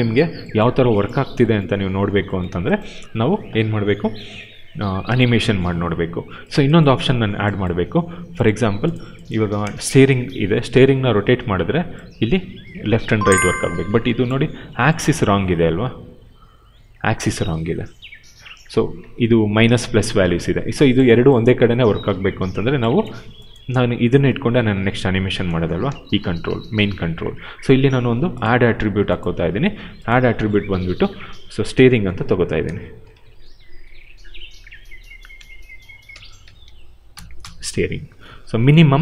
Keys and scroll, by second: 10.6 e, 18.4 ctrl+z, 23.6 w, 25.8 ctrl+z, 33.1 shift+s, 35.3 t, 36.8-37.8 typing.